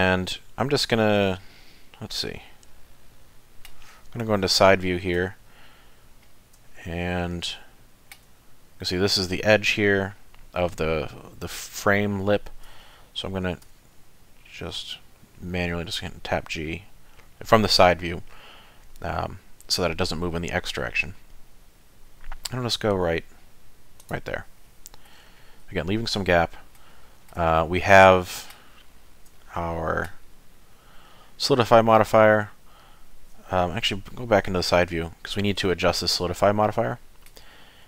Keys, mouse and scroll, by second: 2.0 middle click, 4.2 KP_3, 5.2 z, 5.7-6.6 scroll up 6, 6.7 shift+middle click, 13.7 g, 24.6 middle click, 25.1-25.6 scroll down 6, 25.6 z, 26.3 middle click, 26.9 shift+middle click, 27.5 middle click, 28.7 shift+middle click, 29.3 middle click, 33.5 KP_3, 34.5 z, 34.9 scroll up 2, 35.6 z, 36.3 z, 36.9 shift+middle click, 37.4-37.8 scroll up 5.